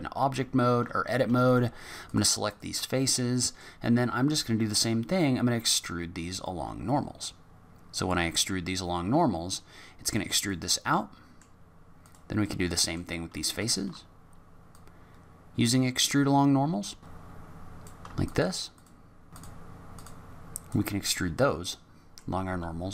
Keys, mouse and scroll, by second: 1.4 shift+click, 2.1 click, 2.5 shift+click, 3.1 middle click, 5.7 click, 7.2 click, 10.9 middle click, 12.0 click, 12.4 middle click, 13.6 shift+click, 14.7 click, 17.8 click, 18.2 shift+click, 18.7 shift+click, 19.3 shift+click, 19.4 shift+click, 19.4 shift+click, 19.4 middle click, 19.5 scroll down 5, 19.6 middle click, 19.6 scroll up 5, 19.7 middle click, 19.8 shift+click, 19.8 shift+click, 19.9 shift+click, 20.0 shift+click, 20.2 click, 21.0 middle click.